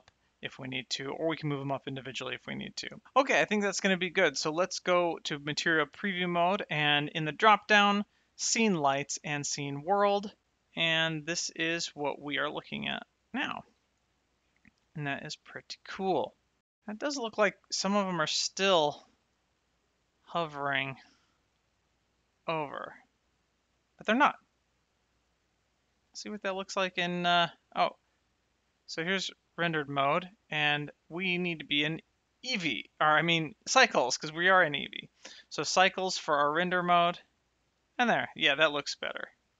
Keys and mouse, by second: 0.6 shift+middle click, 2.1 shift+middle click, 2.9 shift+middle click, 5.0 click, 7.3 click, 8.4 click, 10.4 shift+right click, 11.4 middle click, 12.2 shift+middle click, 13.7 middle click, 14.9 shift+middle click, 18.5 shift+right click, 19.5 middle click, 26.9 click, 31.9 click, 33.4 click, 34.5 click.